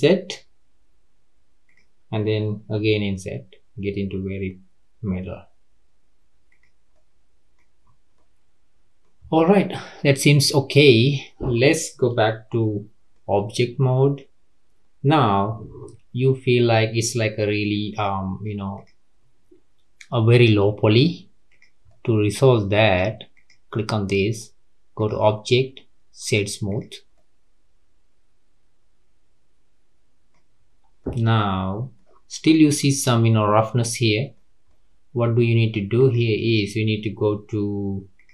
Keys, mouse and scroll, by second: 0.1 i, 2.8 i, 6.9 middle click, 7.8-8.1 scroll up 3, 8.1-9.2 middle drag, 9.2-9.5 scroll down 3, 9.5-12.5 middle drag, 12.5 Tab, 13.1-16.1 middle drag, 17.9 click, 18.7 click, 21.5 click, 21.8-23.3 middle drag, 23.3 click, 24.9-26.8 drag, 27.1-30.1 middle drag, 30.5-31.0 scroll up 3, 31.0-31.5 middle drag, 31.5-31.9 scroll down 2, 31.9-35.7 middle drag, 35.7 scroll up 1, 35.9 click, 38.1 click.